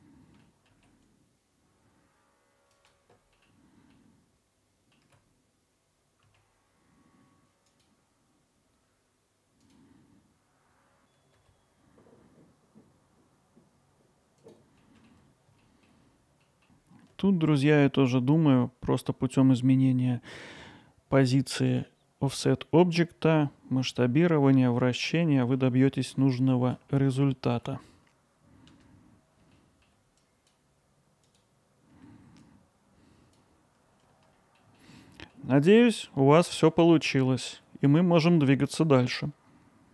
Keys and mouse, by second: 0.4 middle click, 1.3-1.7 alt+middle drag, 2.3-3.4 drag, 3.5 click, 3.7 alt+middle click, 4.4 middle click, 5.3-9.1 drag, 9.2 alt+middle click, 11.9 middle click, 12.3 middle click, 12.5 middle click, 12.6-13.1 alt+middle drag, 16.1 z, 25.2-25.6 middle drag, 25.9 alt+middle click, 26.4 ctrl+alt+middle drag, 26.9 middle click, 27.3 alt+middle click, 29.1 click, 29.7 Tab, 29.7 click, 30.4 ctrl+r, 31.4-31.7 drag, 32.6 alt+shift+click, 32.7 alt+middle click, 34.3 middle click, 34.8 alt+middle click, 35.7 middle click, 36.5 middle drag, 37.1 alt+middle click, 37.9 middle click.